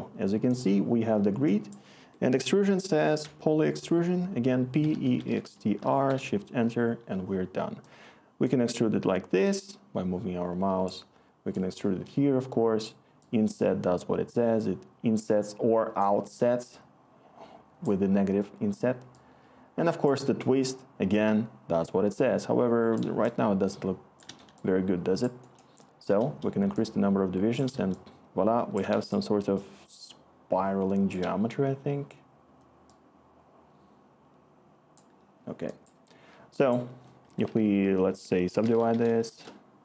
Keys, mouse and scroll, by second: 2.0 Tab, 3.2 typing, 4.6-5.9 typing, 6.1 Return, 23.5-24.5 scroll, 37.3 Tab, 38.3-39.4 typing.